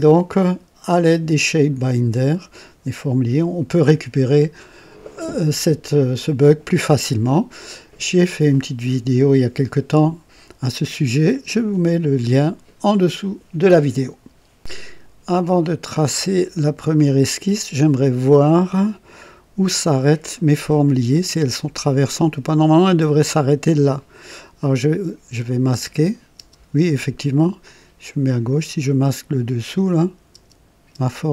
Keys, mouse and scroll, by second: 15.9 click, 16.3-17.1 drag, 18.6-20.0 drag, 20.3 right click, 20.8 click, 25.3 click, 25.7 space, 26.3 space, 27.6 click, 29.6 click, 30.3-30.9 typing.